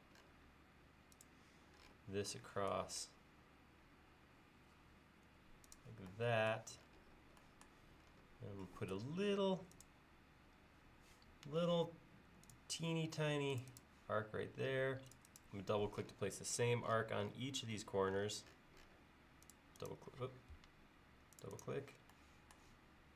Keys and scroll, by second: 9.0 a, 11.4 Escape, 20.7 Escape.